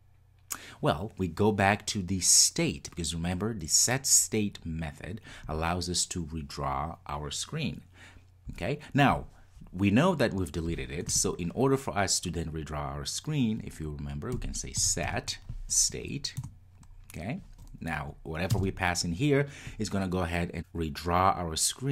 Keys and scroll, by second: 16.5 Return.